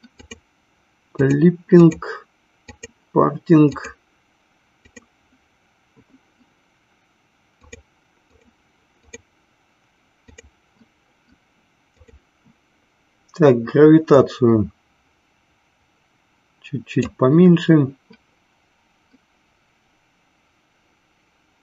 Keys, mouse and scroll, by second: 0.1 click, 1.8 click, 2.5 click, 3.7 click, 4.7 click, 7.7 click, 8.2 click, 9.0 click, 10.3 click, 11.9 click, 14.9-18.0 drag.